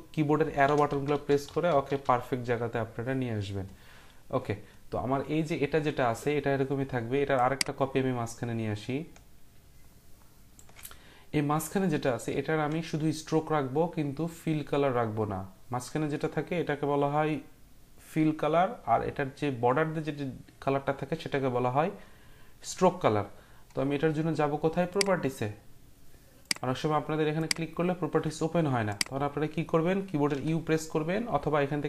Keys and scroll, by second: 0.6 Left, 0.6 Down, 0.9 Down, 1.1 Down, 1.3 Right, 1.5 Down, 1.7 Down, 1.9 Down, 30.2 u.